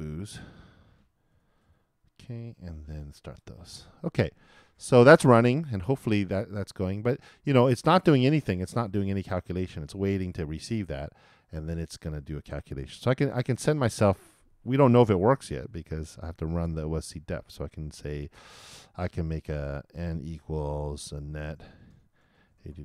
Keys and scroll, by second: 1.3 super+Return, 3.1 super+Return, 21.3-22.8 typing.